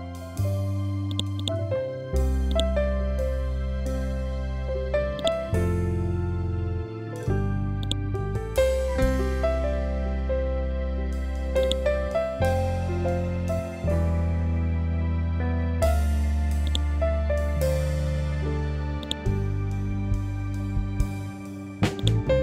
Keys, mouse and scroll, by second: 1.0 click, 1.3 right click, 2.4 click, 5.1 click, 7.7 click, 9.1-9.9 scroll down 1, 11.5-13.8 drag, 13.8-14.5 scroll up 1, 16.5-22.4 drag.